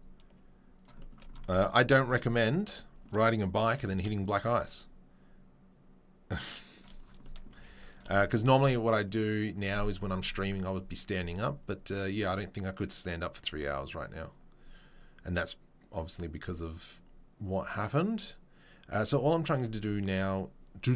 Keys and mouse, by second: 0.3-20.9 shift+middle drag, 3.6 g, 8.0 z, 8.3 z.